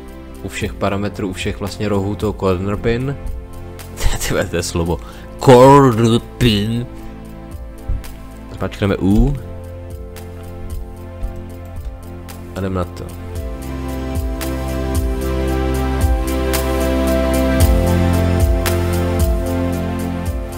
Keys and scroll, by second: 9.1 u, 11.2 space, 13.7 space, 15.3 space, 17.4 space, 19.4 space.